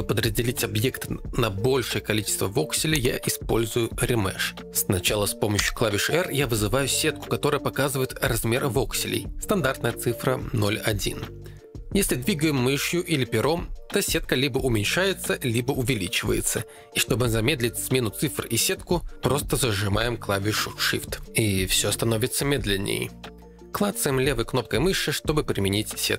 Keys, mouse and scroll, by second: 3.0-5.5 drag, 5.5 r, 12.0 Escape, 12.3 r, 16.6 Escape.